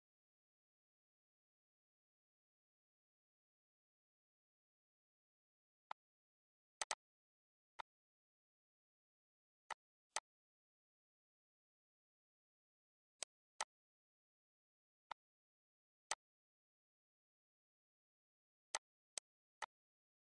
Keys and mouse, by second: 2.0 click, 2.6 Delete, 3.2 ctrl+s, 3.5 click, 4.7 click, 5.6 click, 6.0 ctrl+d, 6.2 click, 7.4 click, 7.7 click, 8.5 click, 9.1 click, 10.7 click, 11.4 ctrl+d, 11.8 click, 12.6 click, 13.6 click, 16.4 click, 16.7 shift+click, 17.2 click, 18.0 click, 19.3 click, 19.9 click.